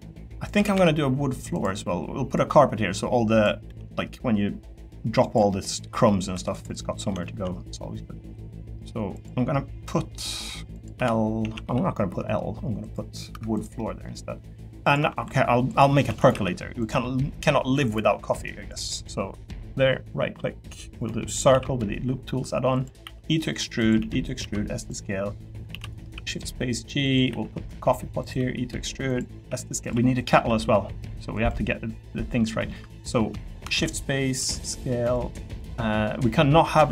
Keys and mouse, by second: 0.5 s, 0.7 x, 3.6 e, 5.2 click, 5.5 middle click, 6.0 middle click, 6.3 3, 6.5 click, 6.8 middle click, 7.2 shift+middle click, 7.8 middle click, 8.8 middle click, 9.8 middle click, 10.9 l, 11.4 a, 11.6 g, 12.8 click, 13.3 Tab, 13.6 click, 13.8 middle click, 14.4 middle click, 15.2 Tab, 15.2 3, 16.0 shift+d, 16.3 s, 18.1-19.2 drag, 21.0 click, 21.5 s, 23.0 e, 23.8 click, 24.0 e, 24.2 click, 24.4 s, 24.8 click, 25.7 shift+d, 26.0 s, 27.0 click, 27.3 e, 28.2 click, 28.3 e, 29.1 click, 29.3 s, 29.8 click, 29.9 e, 30.3 s, 32.0 middle click, 32.7 click, 33.7 shift+d, 34.4 s, 34.7 click, 35.1 click, 36.8 e.